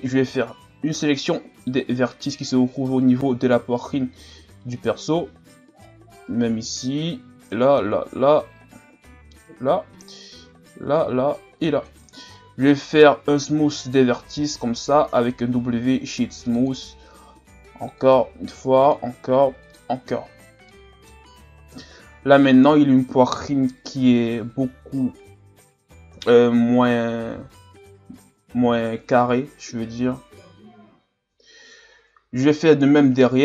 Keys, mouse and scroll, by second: 1.6 c, 12.4 scroll down 3, 12.7 middle click, 13.2-13.6 scroll up 2, 13.6-14.4 scroll down 2, 14.4 w, 17.4 w, 18.5 w, 19.3 w, 20.1 Tab, 20.4 scroll down 4, 20.7-21.7 middle drag, 21.7 KP_1, 22.5 scroll up 4, 26.1 KP_3, 28.1 scroll up 3, 28.7 scroll up 2, 28.8-31.7 middle drag, 32.3 scroll up 5.